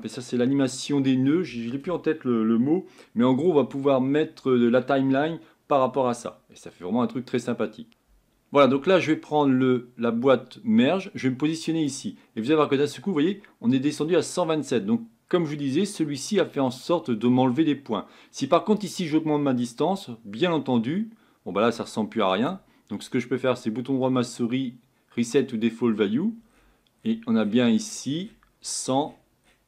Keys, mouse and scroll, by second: 19.3-22.4 drag, 25.4-29.6 right drag.